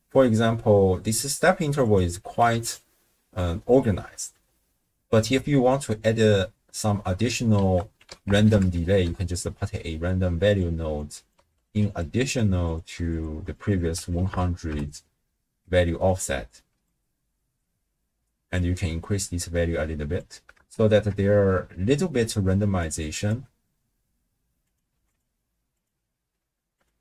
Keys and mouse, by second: 0.2 space, 1.9 click, 7.6 ctrl+a, 11.0-12.7 drag, 11.7 d, 13.5-14.7 drag, 14.3 0, 16.0-17.0 drag, 18.6-20.2 drag, 20.6 shift+space, 22.2 space, 22.9 click, 24.8 click, 25.7-26.8 drag.